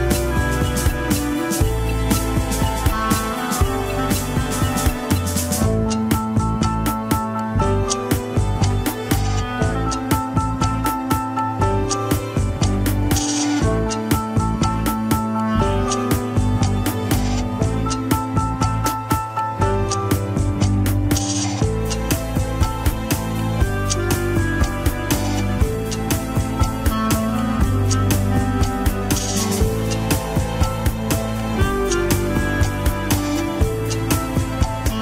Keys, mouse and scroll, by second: 0.0 shift+middle click, 0.2 scroll up 1, 0.3 alt+z, 0.6 s, 1.5 alt+z, 1.7 s, 2.7 alt+z, 3.1-3.9 scroll up 1, 3.9 click, 4.2 scroll up 2, 4.4 alt+z, 4.6 shift+middle click, 4.9 alt+z, 5.1 scroll down 2, 5.2 shift+middle click, 5.7 Tab, 6.1 click, 6.7 Tab, 6.9 scroll up 1, 7.2 r, 8.8 scroll up 2, 8.9 shift+middle click, 9.5 click, 9.7 g, 10.7 click, 11.0 g, 14.5 shift+middle click, 14.7 scroll up 1, 15.1 click, 15.2 g, 16.3 r, 16.8 g, 17.7 click, 17.8 g, 19.8 r, 20.7 s, 22.0 click, 22.2 g, 22.6 scroll down 4, 22.8 ctrl+Tab, 23.6 shift+click, 24.3-26.3 middle drag, 27.1 Tab, 27.4 click, 27.7 middle click, 28.1 alt+z, 28.3 middle click, 28.7 alt+z, 28.9 middle click, 29.4 click, 31.4-32.6 middle drag, 32.6 click, 33.2 click, 34.7-35.0 middle drag.